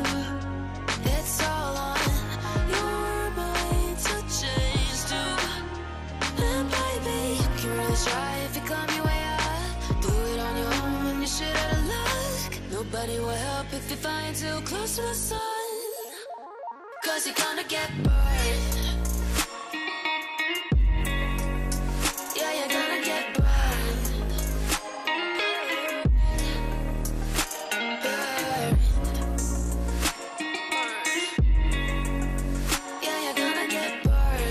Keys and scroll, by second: 10.9 ctrl+r, 15.6 shift+Page_Up, 16.3 Escape, 18.1 F2, 21.0 shift+Page_Up, 25.2 ctrl+k, 30.4 r, 30.9 Escape.